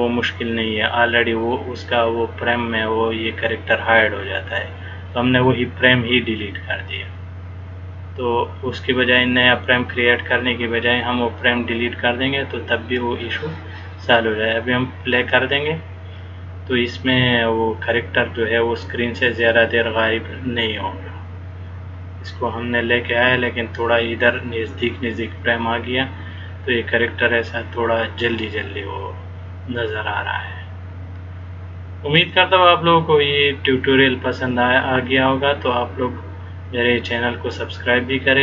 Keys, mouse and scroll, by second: 15.3 click.